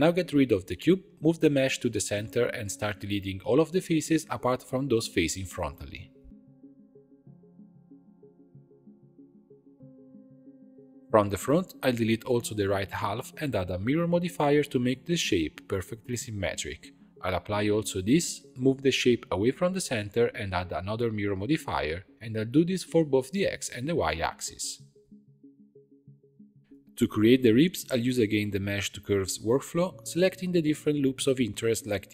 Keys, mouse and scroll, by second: 0.1 Delete, 0.6-1.4 middle drag, 1.4 shift+c, 1.8 shift+s, 3.6 Tab, 4.0 scroll up 1, 4.1 middle click, 4.6-4.9 scroll down 1, 4.9 shift+click, 5.1 middle click, 5.4 shift+click, 5.8 x, 6.6 3, 6.8 alt+click, 7.1 x, 8.6 alt+click, 9.0-11.5 typing, 10.9 alt+click, 12.7 l, 13.3 x, 13.9 scroll down 3, 14.1 Tab, 15.4-17.8 drag, 18.1 click, 18.8 click, 19.1 a, 19.6 click, 20.8 Tab, 21.8-23.9 drag, 24.1 click, 24.6 g, 26.8 click, 26.9 Tab, 27.0 2, 27.3 alt+click, 27.7 alt+shift+click, 28.0 alt+shift+click, 28.3 alt+shift+click, 28.6 alt+shift+click, 29.0 shift+d, 29.4 p, 29.6 Tab, 29.7 click, 29.9 click, 30.1 h, 30.4 click, 30.9 click.